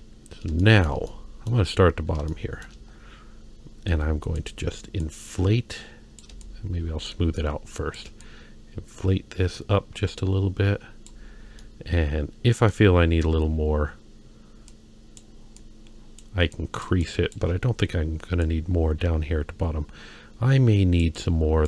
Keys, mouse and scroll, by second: 0.0-0.4 scroll up 2, 0.6 shift+middle click, 1.1 middle click, 2.3 shift+middle click, 2.9-3.4 scroll down 1, 3.4-3.9 scroll up 2, 3.9 f, 5.0-6.2 drag, 6.4 shift+click, 7.4 shift+click, 8.2-11.1 drag, 11.3-12.7 scroll down 2, 11.6-12.7 middle drag, 13.0-14.0 scroll up 1, 14.0-14.4 scroll up 1, 14.7 click, 15.5 click, 16.5 click, 17.0 shift+click, 18.4-21.0 drag, 21.1 click.